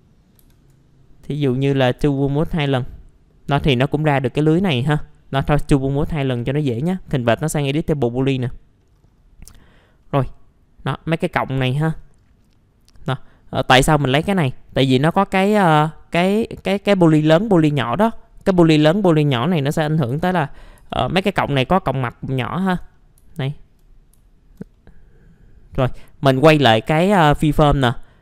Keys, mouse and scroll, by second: 0.4 ctrl+z, 1.8 ctrl+z, 2.2 click, 4.5 middle click, 4.7 scroll down 1, 5.5 scroll up 1, 5.9 middle click, 6.1 scroll down 1, 6.7 right click, 8.2 click, 8.8 middle click, 8.9-9.3 scroll down 1, 9.4 middle click, 10.1 scroll down 1, 10.6-11.5 scroll up 1, 11.5 scroll down 1, 11.9 middle click, 12.9 scroll up 1, 17.4 scroll down 1, 17.8 alt+middle click, 18.2 scroll up 1, 18.5 alt+middle click, 20.1 alt+p, 20.8 typing, 21.3 scroll down 1, 23.3 alt+middle click, 24.2 alt+middle click, 26.7 click.